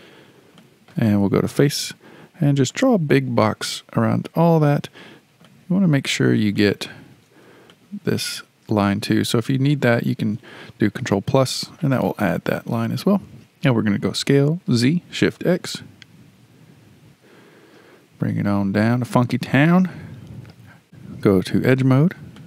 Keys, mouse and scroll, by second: 0.2-0.6 scroll down 2, 0.6-1.3 shift+middle drag, 1.3 3, 2.7 click, 5.0-6.6 scroll up 6, 6.6-10.9 shift+middle drag, 11.2 ctrl+KP_Add, 14.2 s, 19.5-20.8 shift+middle drag, 21.2 2, 21.8 click, 22.4 click.